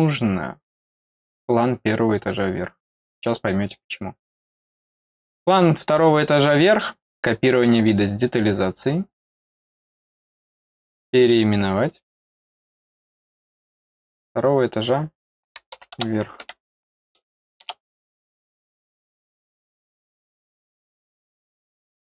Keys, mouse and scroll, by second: 4.6 right click, 7.2 click, 7.8 click, 10.2 right click, 11.3 click, 12.1 click, 13.0-14.7 drag, 18.5 click, 20.4 middle click, 20.4 scroll down 1.